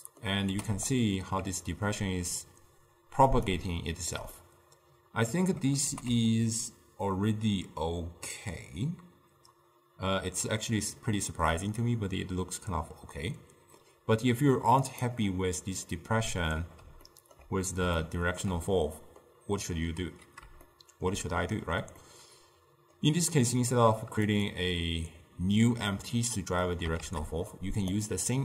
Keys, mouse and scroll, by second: 0.6 g, 3.8-6.0 shift+middle drag, 6.0 g, 15.9-24.4 middle drag, 24.4 click, 27.1 shift+d.